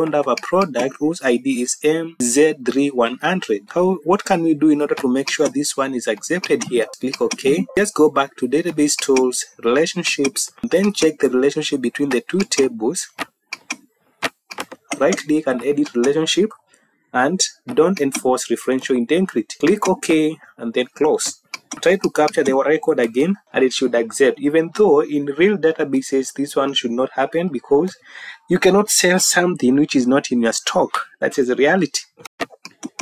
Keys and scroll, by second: 22.9 Home, 25.8 Up, 27.2 Up, 27.8 Down.